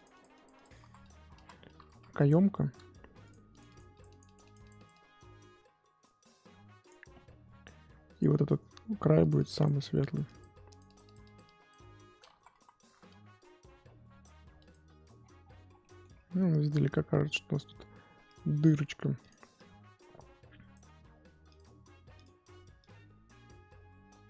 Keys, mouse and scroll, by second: 0.8 ctrl+z, 1.3 ctrl+z, 1.9 ctrl+z, 2.0 middle click, 2.8 f, 3.5-8.2 drag, 9.2-12.3 drag, 12.3 ctrl+z, 12.5 ctrl+z, 13.1-15.1 drag, 15.1-16.1 scroll down 14, 15.8 middle click, 16.1-18.3 scroll up 16, 18.3 click, 18.6 middle click, 19.0 f, 19.5-21.5 drag, 22.2 click, 22.8-24.2 drag.